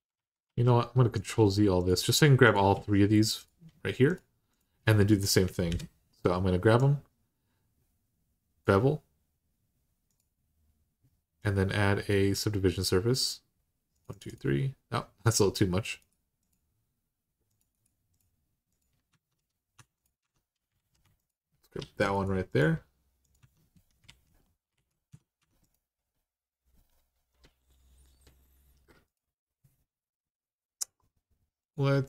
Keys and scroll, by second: 5.5 ctrl+j, 18.9 Tab, 19.5 Tab, 20.0 Tab, 20.5 alt+z, 21.6 alt+z, 23.2 Tab, 23.8 alt+z, 24.5 alt+z, 24.9 Tab, 25.2 Tab.